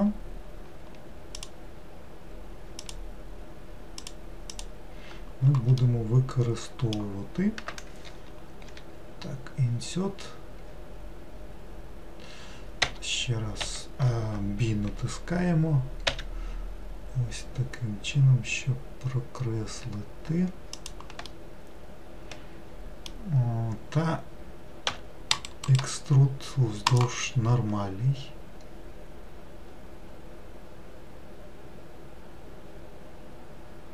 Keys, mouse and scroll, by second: 2.9 shift+click, 4.0 shift+click, 4.6 shift+click, 5.9-8.7 middle drag, 21.3-24.4 middle drag, 24.9 e, 25.7-28.8 right drag.